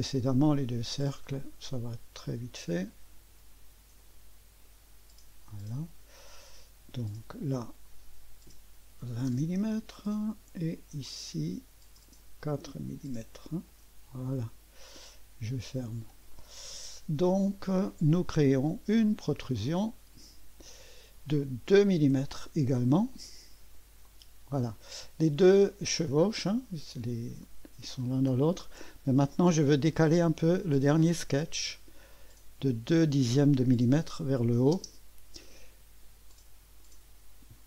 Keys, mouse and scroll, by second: 1.3 click, 2.5 click, 2.9 click, 4.0-5.5 drag, 7.0 click, 7.9 click, 8.5 click, 8.8-9.8 typing, 11.0 click, 12.0 click, 12.7 4, 13.7 Return, 14.9 click, 16.3-17.8 right drag, 17.8 click, 19.5 click, 20.4 typing, 22.1 typing, 24.1 click, 24.9 scroll up 1, 25.4-27.4 drag, 28.6 middle click, 30.1 click, 32.1 click, 32.9 click, 33.5 click, 34.7 typing, 36.3-37.3 drag.